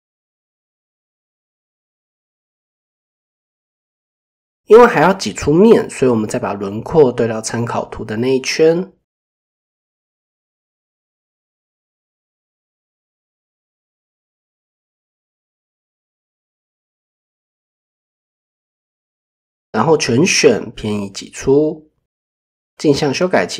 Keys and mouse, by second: 4.7 click, 11.4 g, 13.1 click, 13.6 click, 14.7 click, 16.0 g, 16.6 click, 18.8 a, 21.3 ctrl+e, 22.9 click.